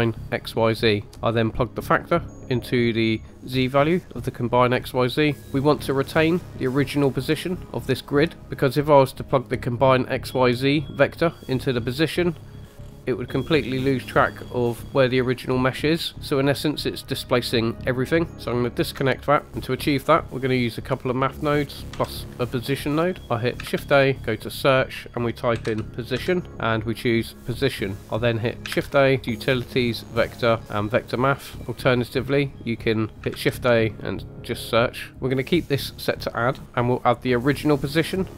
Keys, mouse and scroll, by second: 0.8-1.6 typing, 1.1 click, 1.7-2.0 drag, 5.1 middle click, 10.8-11.2 drag, 12.6-13.8 scroll down 4, 14.3 scroll up 2, 18.3 ctrl+z, 18.3 ctrl+click, 18.3 ctrl+right click, 19.8 scroll down 2, 20.5 click, 21.9 g, 23.0 click, 23.2 shift+a, 23.6 shift+a, 28.0 click, 28.7 shift+a, 32.5-33.4 typing, 32.8 click, 36.7 click, 36.7 right click, 37.3 drag.